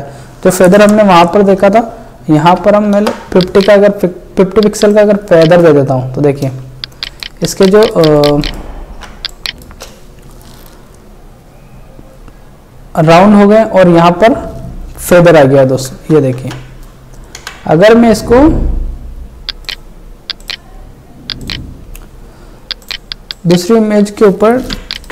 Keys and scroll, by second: 6.7 ctrl+space, 7.1 ctrl+space, 9.8 space, 15.9 ctrl+c, 21.5 space.